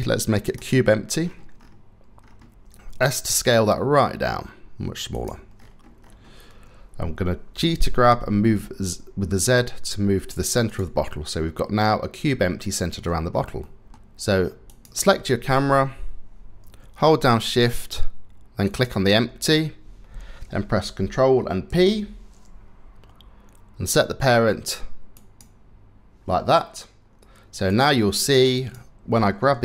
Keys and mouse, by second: 2.8 s, 7.2 g, 10.7-12.7 drag, 13.2 click, 13.7 middle click, 14.3 click, 21.3 ctrl+p, 27.3 click, 28.2 click, 29.3 g.